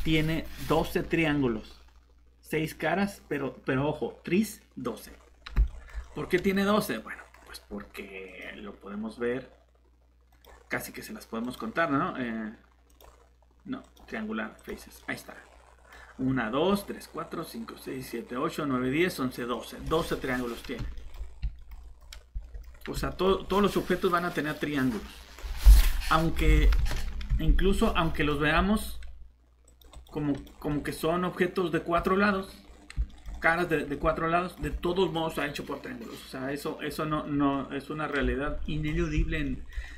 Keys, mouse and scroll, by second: 5.6 middle click, 8.3 click, 15.0 middle click, 20.4 scroll up 1, 20.9 middle click, 21.1 scroll down 1, 21.6 middle click, 22.0 scroll down 1, 22.3 shift+Tab, 22.4 middle click, 22.6 scroll up 1, 23.1 middle click, 23.3 scroll up 1, 26.8 ctrl+shift+z, 27.3 z, 28.1 middle click, 29.6 click, 30.7 middle click, 32.6 scroll up 1, 33.1 middle click, 33.6 scroll down 1, 33.9 middle click.